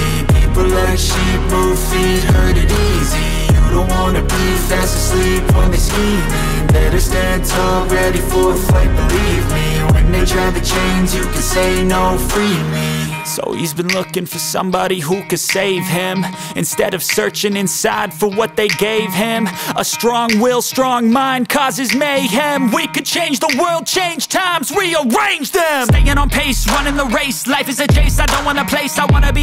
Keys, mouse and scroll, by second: 2.3 space, 3.0-4.2 drag, 4.4-5.0 drag, 5.7 click, 5.9 space, 8.8 space, 9.8-10.2 middle drag, 10.2 z, 10.4 middle click, 10.9 shift+middle drag, 11.5-12.6 middle drag, 13.1 z, 19.2 shift+a, 24.8 r, 27.1 click, 27.5 click, 28.4 click, 28.8 click.